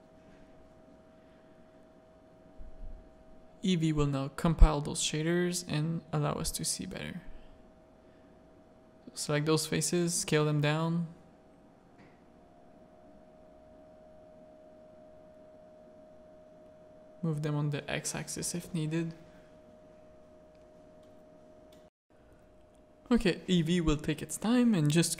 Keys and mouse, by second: 3.7-4.0 middle drag, 4.0-4.4 middle drag, 4.9 click, 5.3 z, 5.7 shift+middle click, 6.1 middle click, 6.4 z, 7.3 middle click, 7.7 Tab, 7.9 a, 8.4 z, 8.8 click, 9.7 z, 10.1 s, 16.4-17.9 drag, 18.1 Tab, 18.4 alt+a, 18.9-19.8 middle drag, 19.9 z, 20.5-21.0 middle drag, 21.3-24.0 drag.